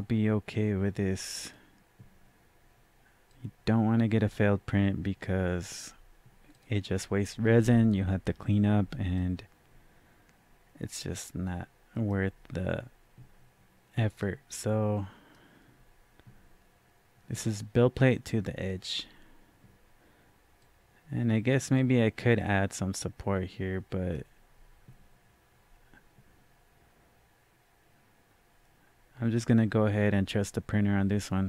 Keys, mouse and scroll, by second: 9.1-17.7 drag, 20.6-30.9 drag.